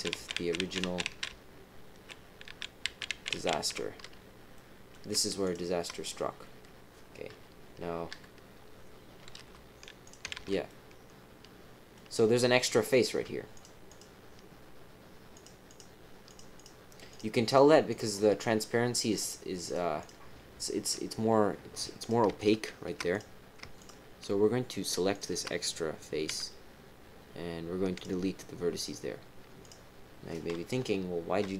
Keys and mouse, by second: 0.1 ctrl+z, 0.3 ctrl+z, 0.6 ctrl+z, 0.8 ctrl+z, 1.0 ctrl+z, 1.3-2.0 ctrl+z, 2.4 ctrl+z, 2.8 ctrl+z, 3.1 ctrl+z, 3.3 ctrl+z, 3.5 ctrl+z, 4.5 click, 5.4 shift+click, 7.3 KP_2, 8.1 KP_3, 9.3 g, 10.3 ctrl+z, 10.6-11.9 middle drag, 12.5 middle click, 13.5 shift+click, 13.8 shift+click, 15.3 shift+click, 15.7 shift+click, 17.1 shift+click, 17.4 shift+click, 17.9 shift+click, 19.2 shift+click, 19.6 shift+click, 20.0 shift+click, 20.8 shift+click, 21.7 click, 22.0 click, 22.3 shift+click, 23.1 click, 23.7 shift+click, 24.8 shift+click, 25.1 shift+click, 26.3 x, 29.6 click, 30.7 KP_3.